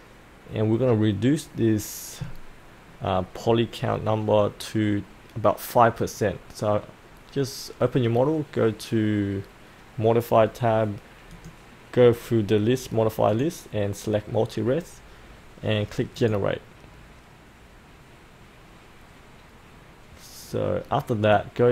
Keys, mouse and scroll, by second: 8.3-21.7 drag.